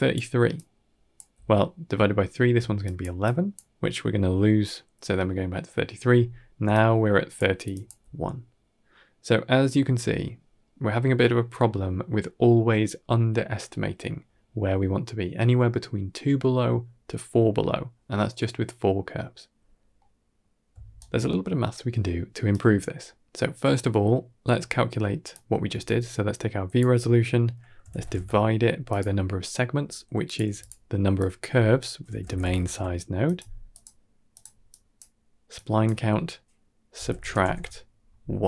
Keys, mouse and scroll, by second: 0.0-1.2 typing, 0.4 click, 2.4-3.6 typing, 2.7 click, 3.1 click, 3.1 ctrl+z, 6.5 d, 6.6 click, 7.2-7.6 d, 7.7 d, 7.8 d, 19.8 scroll down 3, 20.0-20.4 middle drag, 20.6 d, 20.8-22.4 right drag, 22.4 d, 22.8-23.2 middle drag, 23.5 scroll up 2, 23.8-24.1 middle drag, 25.2-28.8 drag, 30.1 click, 30.3 g, 31.0-33.1 drag, 33.6-34.3 drag, 34.5 click, 35.4-38.4 drag.